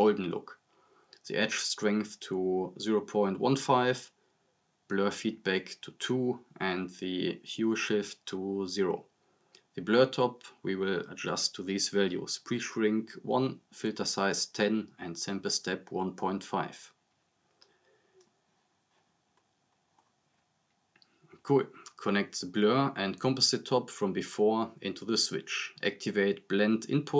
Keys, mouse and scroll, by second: 4.9-5.3 drag, 8.2-8.5 drag, 9.7 scroll up 1, 10.2 click, 14.5-17.0 drag.